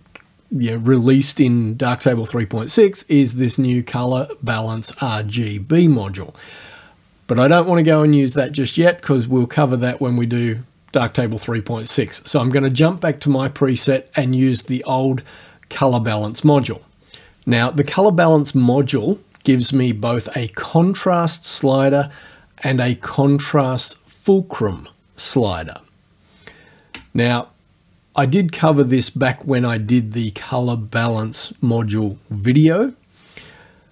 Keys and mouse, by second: 11.3 click, 13.0 click, 14.6 click, 16.5 click.